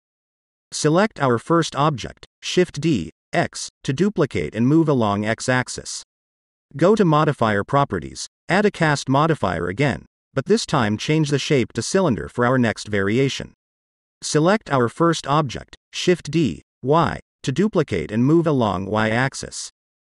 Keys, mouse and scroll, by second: 0.2-0.6 scroll down 1, 0.6 ctrl+z, 0.6 shift+d, 0.8 x, 2.0 click, 2.5-3.3 middle drag, 3.9 click, 5.8 click, 6.5 click, 6.8-9.4 drag, 10.8-11.7 drag, 12.3-13.3 middle drag, 14.1 click, 15.3 shift+d, 16.8 y, 17.9 click, 19.6 click.